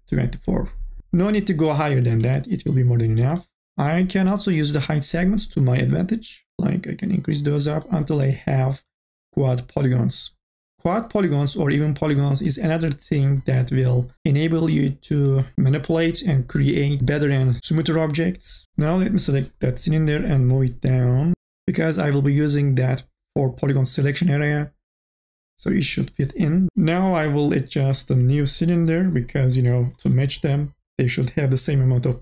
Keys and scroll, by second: 1.0 ctrl+z, 2.4 ctrl+z.